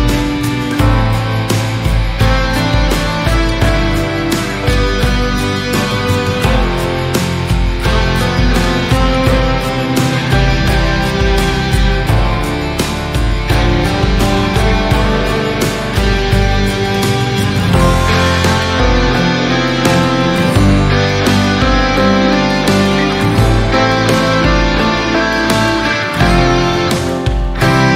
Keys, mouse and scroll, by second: 1.8 click, 2.8-5.1 middle drag, 5.5 KP_1, 6.3 alt+z, 7.4 scroll up 2, 7.9 alt+z, 8.4 click, 10.4 click, 10.7 scroll down 3, 11.0-11.6 middle drag, 11.6 click, 12.4 Tab, 13.5-14.7 middle drag, 14.7-15.7 scroll up 2, 15.7 KP_7, 16.9-17.4 scroll down 2, 18.5-19.6 middle drag, 19.6-20.2 scroll up 2, 20.2 3, 21.6 alt+click, 22.7-23.1 scroll down 2, 23.3 shift+middle click, 24.0-24.7 scroll up 1, 27.4 click.